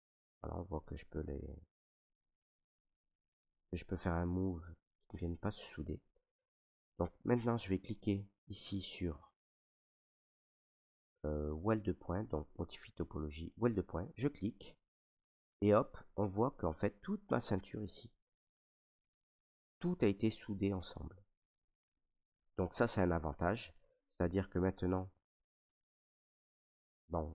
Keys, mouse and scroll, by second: 2.8 click, 3.6 ctrl+right click, 4.6 ctrl+z, 6.6 ctrl+right click, 9.3 ctrl+click, 14.7 click, 17.7 ctrl+click, 17.8 ctrl+right click, 21.8 right click, 22.6 right click, 23.7 right click, 23.8 ctrl+right click, 24.7 alt+right click, 25.7 s, 26.4 click.